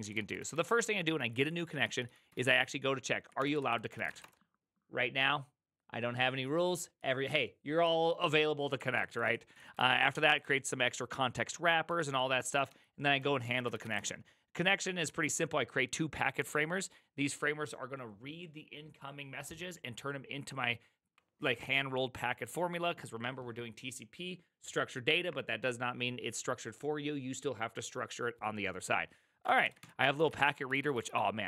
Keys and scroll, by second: 0.0-4.6 typing, 7.7 typing, 9.1-15.0 typing, 29.3-31.4 typing.